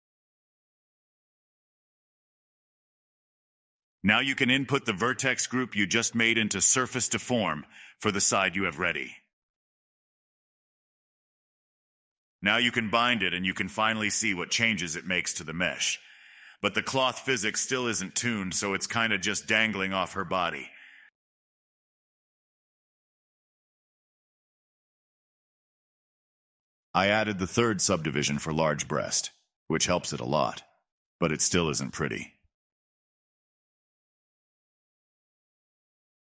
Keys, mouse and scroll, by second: 0.0 Tab, 0.4 middle click, 2.4-3.5 drag, 6.3-9.9 drag, 9.9 scroll up 2, 10.1-11.2 middle drag, 11.2 click, 11.8-13.0 middle drag, 13.0-13.6 drag, 13.6-14.3 middle drag, 14.3 space, 16.0-19.2 middle drag, 19.2 space, 19.8-20.5 drag, 20.5-21.2 shift+middle drag, 21.2 space, 22.0 space, 22.8-24.0 drag, 26.0 click, 26.5 middle drag, 26.8 space, 31.0 space, 32.2-34.2 drag, 34.2 scroll up 2, 34.4-36.3 middle drag.